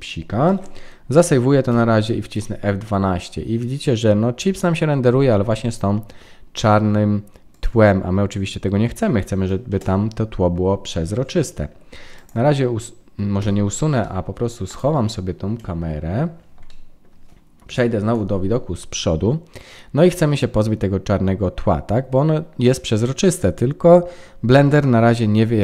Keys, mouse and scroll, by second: 0.4 ctrl+s, 9.6 KP_0, 12.1 click, 13.3 h, 14.0 middle click, 14.6 click, 15.7 KP_Decimal, 16.6 middle click, 17.6 KP_1.